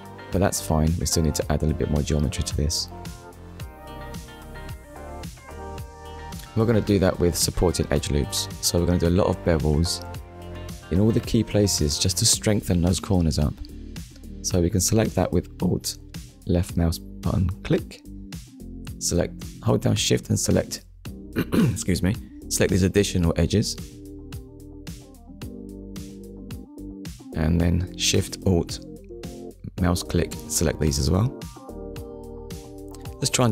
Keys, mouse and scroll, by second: 0.3 Tab, 0.8 scroll up 1, 3.3 Tab, 3.9 scroll down 1, 4.6 shift+middle click, 5.7 click, 6.2 Tab, 6.9 middle click, 10.5 click, 11.1 middle click, 13.8 alt+click, 15.9 middle click, 18.7 shift+click, 19.7 shift+click, 20.7 shift+click, 21.1 middle click, 23.1 shift+click, 23.7 middle click, 26.1 alt+shift+click, 27.6 alt+shift+click, 28.4 middle click, 30.4 alt+shift+click, 32.5 alt+shift+click, 32.9 middle click.